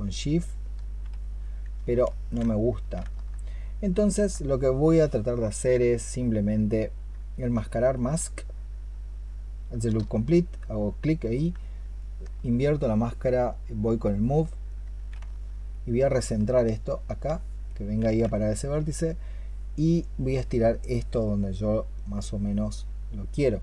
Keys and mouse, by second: 1.9 ctrl+z, 4.0 alt+click, 7.4-9.7 space, 11.8 ctrl+click, 16.6 alt+click, 16.8 alt+click, 18.2 alt+click.